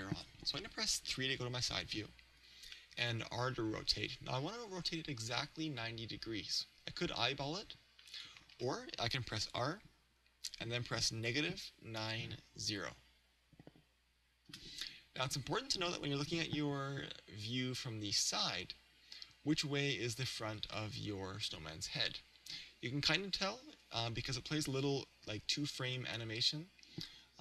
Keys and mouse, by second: 0.2 KP_3, 3.0 r, 8.4-11.3 drag, 8.6 ctrl+z, 9.5 r, 20.3 click, 23.8 KP_1.